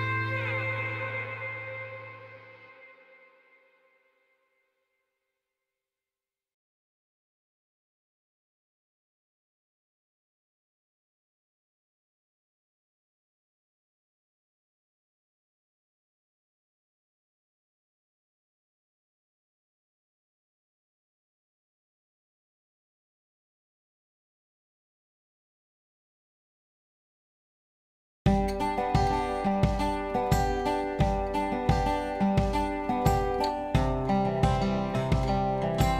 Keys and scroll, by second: 2.9 3, 6.3 1, 27.9 Escape.